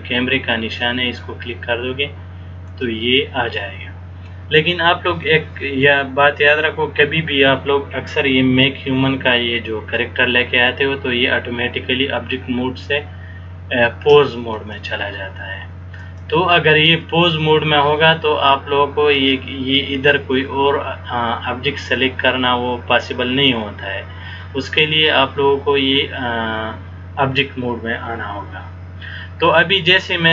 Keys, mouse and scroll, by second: 2.8 click, 14.7 click.